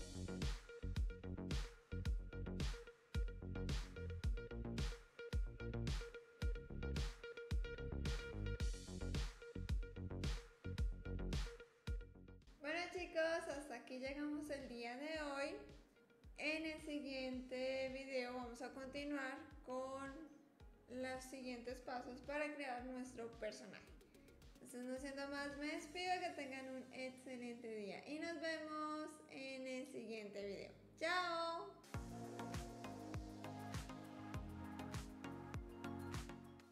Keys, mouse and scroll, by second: 11.4 middle click, 11.7 shift+middle drag, 12.0 ctrl+middle click, 12.1 ctrl+s.